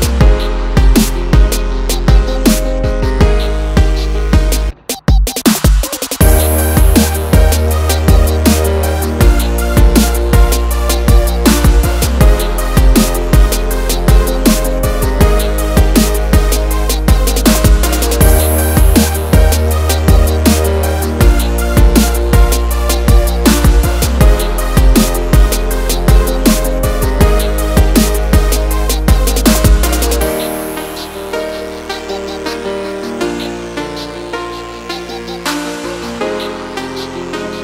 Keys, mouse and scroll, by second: 1.2 ctrl+click, 2.3 click, 4.5 ctrl+click, 5.3 click, 6.6 click, 7.3 click, 8.9 click, 9.6 click, 11.8 click, 12.0 double click, 13.2 click, 15.1 click, 15.9 click, 16.8 click, 17.3 scroll down 1, 17.6 scroll up 1, 18.1 double click, 19.7 click, 21.1 click, 21.7 click, 22.6 click, 22.9 double click, 23.5 click, 24.8 click, 25.6 click, 26.5 click, 28.2 ctrl+o, 29.8-30.2 scroll down 1, 31.2 click, 32.0 scroll down 1, 32.6 click, 34.0 click, 34.2 scroll down 1, 34.8 click, 35.5 click, 37.2 click.